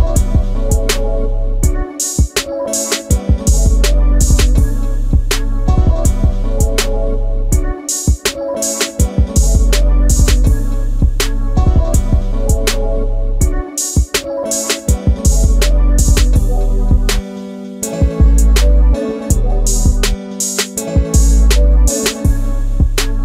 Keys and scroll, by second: 0.1 l, 4.9 shift+space, 12.5 space, 13.9 Delete.